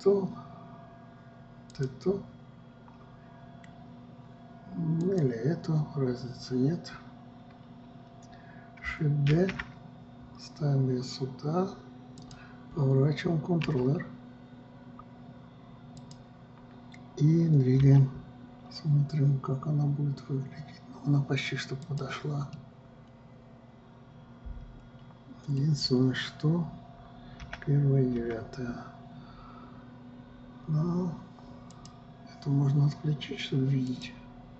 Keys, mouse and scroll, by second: 0.1 click, 2.3 click, 5.6 click, 9.9 shift+d, 14.3 r, 18.4 g, 23.1-28.0 middle drag, 28.0 KP_1, 28.7 KP_9, 32.3 click, 34.4 click.